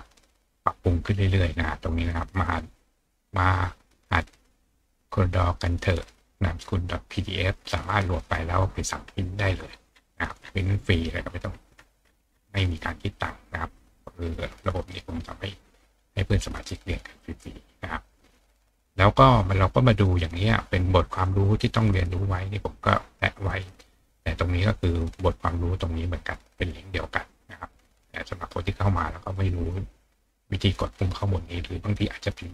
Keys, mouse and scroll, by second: 1.5-2.2 scroll down 1, 9.0-10.7 scroll up 2, 10.7-11.3 scroll up 1, 11.3-12.2 scroll up 1, 12.2-12.8 scroll up 1, 12.8-13.5 scroll up 1, 14.9 click, 17.2 click.